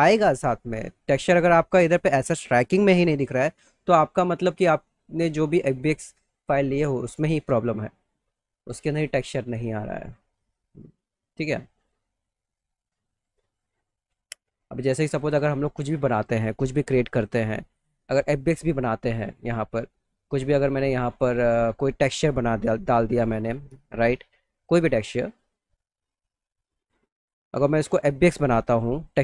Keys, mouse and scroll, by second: 1.7 click, 2.7 click, 8.2 click, 9.0 click, 9.5 click, 15.0 click, 15.9 click, 16.7 click, 17.7 click, 20.6 click, 24.5 click, 26.6 click, 26.8 click, 28.6 click.